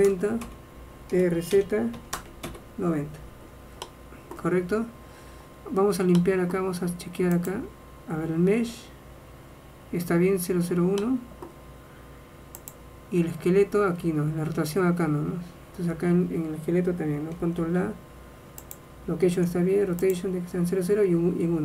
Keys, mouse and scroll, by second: 1.3 r, 3.6 middle click, 4.0 middle click, 7.6-9.2 drag, 9.2-12.8 middle drag, 12.8-14.5 drag, 16.2 middle click, 17.7 ctrl+a, 19.5 ctrl+a.